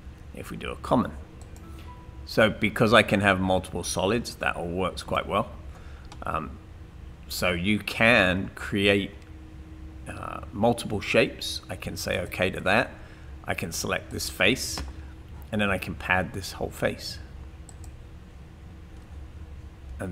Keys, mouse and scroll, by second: 14.1 click.